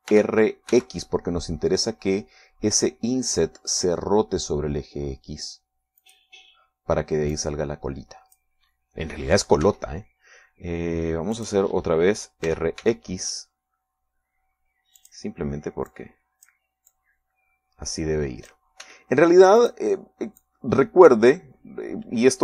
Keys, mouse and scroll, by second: 1.4 r, 2.0 x, 7.3 click, 8.6-9.9 drag, 10.9 e, 12.7 click, 13.7 r, 14.1 x, 16.3 click, 17.2 click, 18.2-20.0 drag, 20.1 s, 20.9 click, 21.7-22.4 drag.